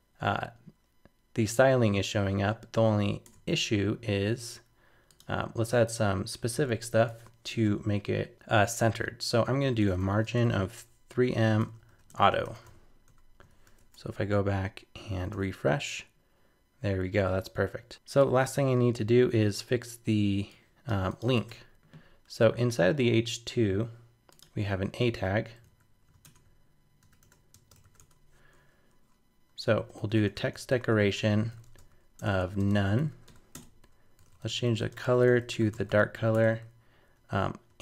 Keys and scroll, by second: 3.2 super+Tab, 7.1 shift+super+Left, 13.5 super+s, 13.8 super+Tab, 15.3 super+r, 21.4 super+Tab, 25.6 super+z, 26.2 super+Return.